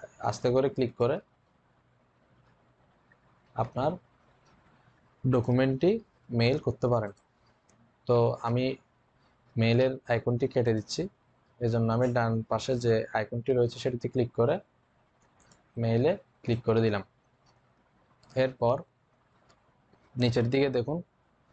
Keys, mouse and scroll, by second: 0.8 click, 5.2 click, 10.5 click, 15.3 click.